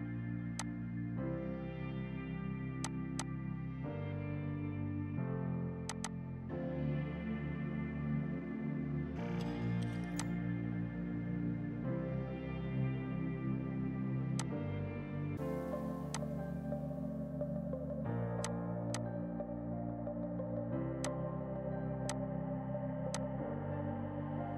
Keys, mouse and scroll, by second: 2.5 space, 2.9 click, 5.0 space, 5.9 click, 8.1 KP_4, 8.3 KP_0, 8.5 KP_Enter, 9.4 space, 10.1 click, 10.7 ctrl+right click, 12.8 space, 14.4 click, 15.2 space, 16.2 click, 16.3 right click, 18.5 click, 20.6 right click, 21.1 shift+click, 21.3 c, 22.1 shift+click, 23.0 F2, 23.1 click, 23.5 right click.